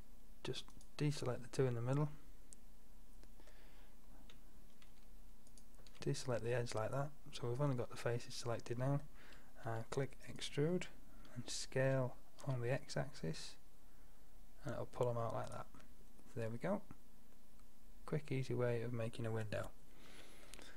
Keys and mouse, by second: 0.2-0.7 drag, 0.8-1.4 drag, 1.4-3.2 middle drag, 5.5-8.2 middle drag, 9.7 e, 11.9 s, 16.1-17.8 middle drag.